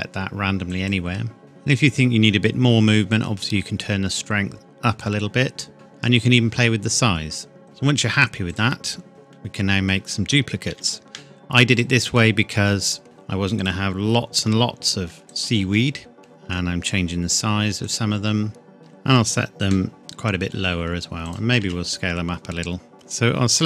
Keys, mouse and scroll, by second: 1.4 middle click, 3.1 click, 5.7 middle click, 8.5 click, 9.4 middle click, 10.7 shift+d, 11.8 click, 12.2 middle click, 13.0 r, 13.6 click, 14.4 g, 15.3 click, 16.2 click, 16.5 s, 17.9 click, 18.8 middle click, 19.1 scroll down 1, 20.0 g, 21.3 click, 21.6 s, 22.9 click, 23.1-23.6 scroll down 1.